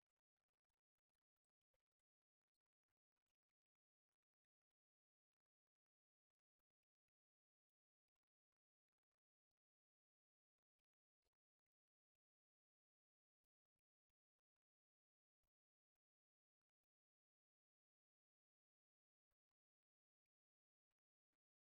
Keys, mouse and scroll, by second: 0.7 middle click, 1.3 click, 1.9 click, 3.1 F3, 4.1 F3, 6.7 click, 7.1 click, 8.9 alt+middle click, 9.4 click, 17.0 click, 18.4 e.